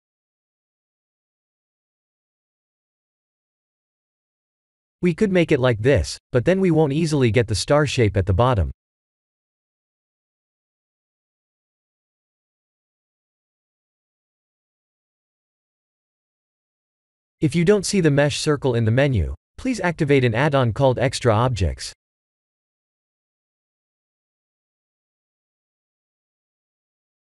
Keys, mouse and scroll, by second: 2.4-2.9 scroll up 3, 3.0 shift+middle click, 3.6-4.1 scroll up 2, 4.1-4.9 middle drag, 9.0-10.0 middle drag, 10.4 3, 10.9 click, 11.9-12.5 middle drag, 12.8-13.3 shift+middle drag, 13.9 click, 14.3 x, 14.8 shift+a, 25.0-27.3 drag.